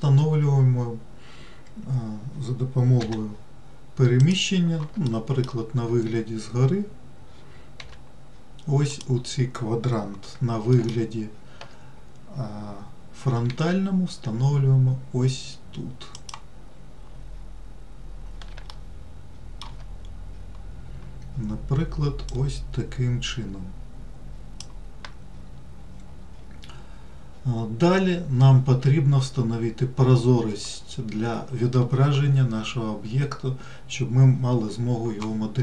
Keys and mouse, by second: 3.3 g, 5.4 alt+middle click, 8.1 g, 11.1 alt+middle click, 13.8 g, 19.0 shift+middle click, 22.7-24.9 drag.